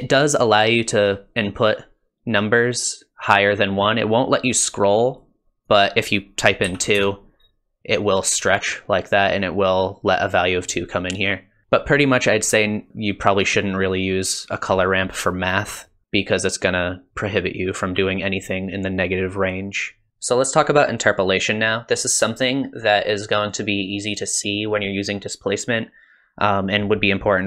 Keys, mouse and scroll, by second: 0.6 click, 2.7 click, 11.6 ctrl+z, 11.6 middle click, 11.6-12.2 scroll up 1.